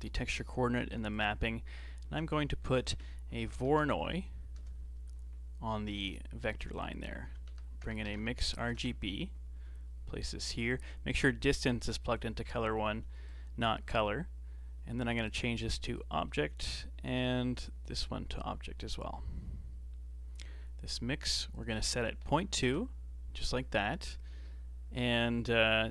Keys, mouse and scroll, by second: 0.5 g, 1.4-2.1 middle drag, 2.1 shift+a, 6.4 shift+a, 11.2 click, 13.2 click, 13.9-15.2 middle drag, 15.2 click, 16.6 click, 18.0 click, 21.5-23.5 drag, 23.5 scroll up 4, 23.8-25.9 middle drag.